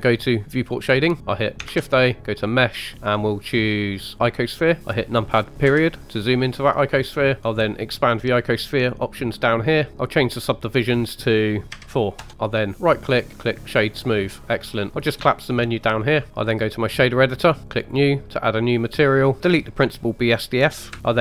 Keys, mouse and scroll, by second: 0.7 click, 1.2 shift+a, 1.6 shift+a, 5.6 KP_Decimal, 7.4 click, 8.9 click, 10.9-12.3 drag, 12.7 right click, 14.9 click, 16.0 click, 17.8 click, 18.6-19.4 middle drag, 19.4 click.